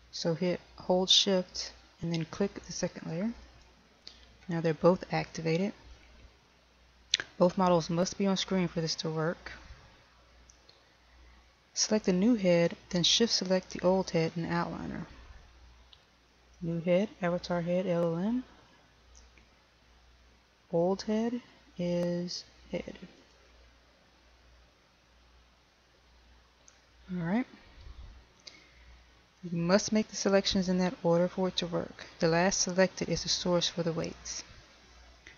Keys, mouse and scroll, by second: 4.6 shift+click, 17.5 click, 24.4 shift+click.